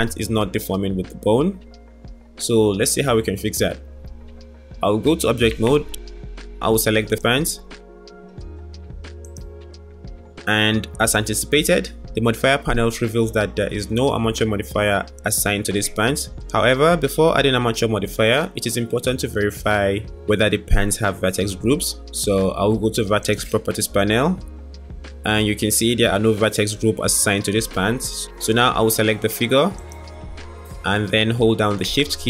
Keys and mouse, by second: 5.5 Tab, 23.3 click, 29.8 click, 30.1 click.